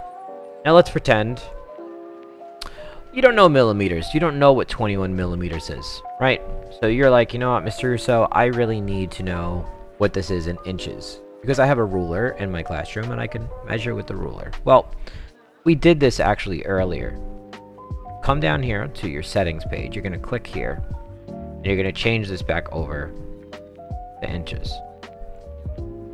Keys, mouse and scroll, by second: 0.6 click, 1.4 click, 6.7 click, 16.2 click, 19.6 click, 21.8 click, 23.8 click, 25.3 click.